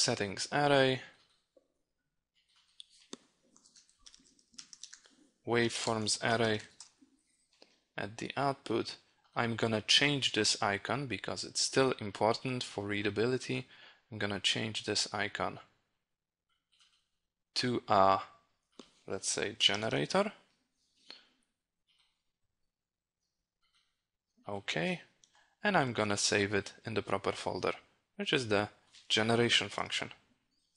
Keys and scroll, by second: 25.4 ctrl+s.